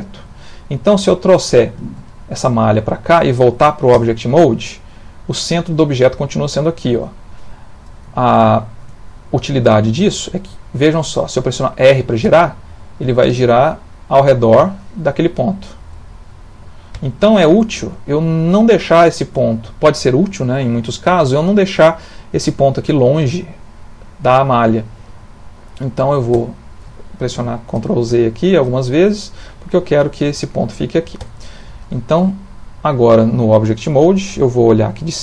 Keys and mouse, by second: 0.9 g, 3.9 Tab, 8.2 ctrl+middle click, 12.2 r, 26.3 Tab, 27.3 ctrl+z, 27.8 ctrl+z, 28.2 ctrl+z, 28.9 middle click, 30.6 middle click, 31.2 Tab, 31.7 middle click.